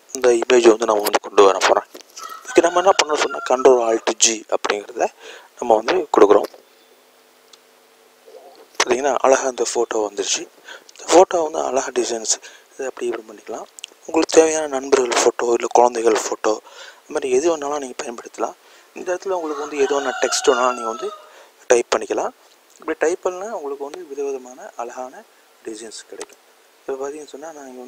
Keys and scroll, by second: 8.1-8.8 typing.